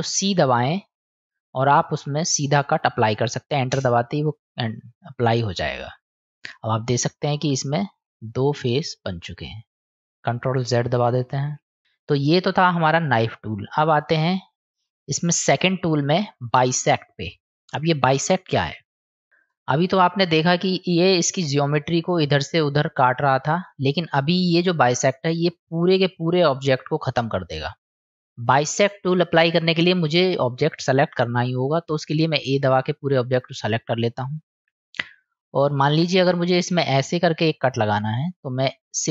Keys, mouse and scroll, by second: 5.0 middle click, 6.9 click, 7.7 click, 8.3 click, 8.7 click, 9.5 middle click, 11.3-11.8 ctrl+z, 11.8 middle click, 14.2 click, 15.9-17.2 drag, 19.1 click, 32.5 a, 34.6 middle click, 35.4 click, 35.4 right click, 38.2-39.1 drag.